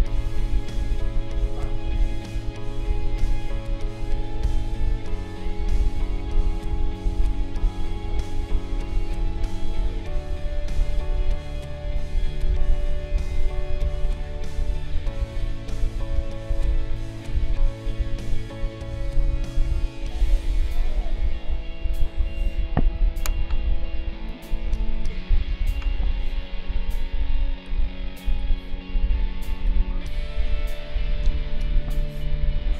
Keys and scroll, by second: 23.3 ctrl+a, 24.4 ctrl+g, 25.6 ctrl+z, 31.2 ctrl+g.